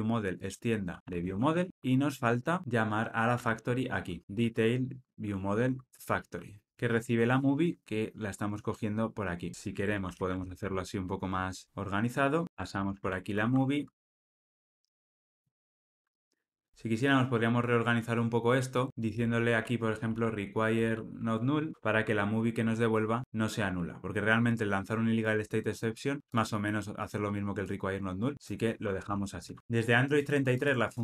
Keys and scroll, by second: 1.7 Tab, 1.7 alt+super+[, 5.9 Return, 12.4 super+x, 13.0 super+v, 21.6 Return, 21.8 Delete.